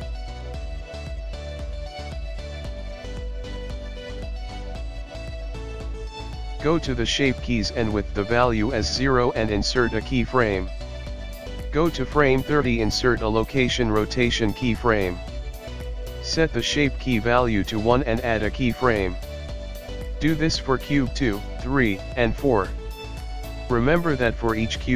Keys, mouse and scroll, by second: 2.5 i, 8.9 i, 10.9 click, 13.4 click, 16.3 i, 19.7 click, 21.4 g.